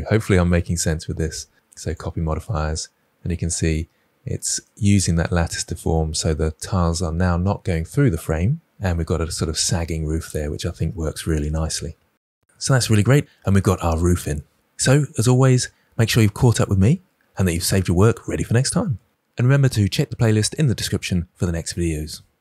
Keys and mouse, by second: 0.7 ctrl+l, 2.9-4.7 middle drag.